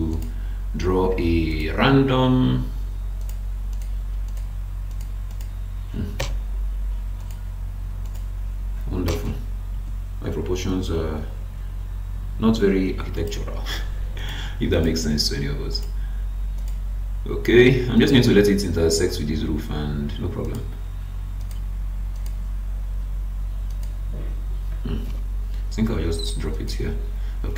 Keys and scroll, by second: 6.2 BackSpace, 25.0 BackSpace, 25.5 space.